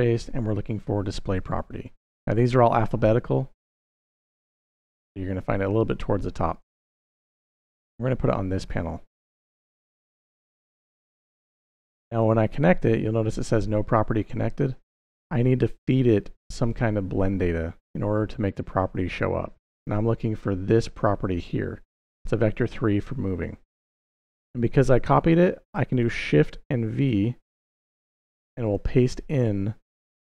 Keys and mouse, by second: 9.6-10.4 drag, 10.9-12.0 drag, 18.0-19.0 drag, 23.7 click, 25.4 click, 26.9 shift+v, 28.5 click.